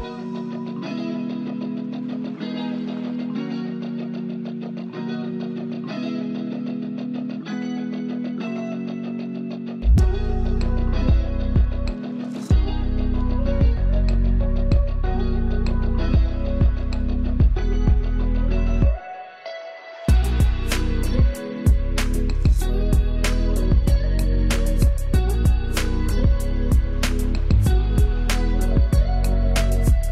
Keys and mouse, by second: 0.0 Down, 0.7 Left, 1.2 Down, 2.2 click, 3.5 ctrl+space, 3.6-19.3 ctrl+alt+drag, 19.8 ctrl+space, 20.0 ctrl+click, 21.2 ctrl+shift+], 22.3-24.8 drag, 24.8-30.1 shift+drag.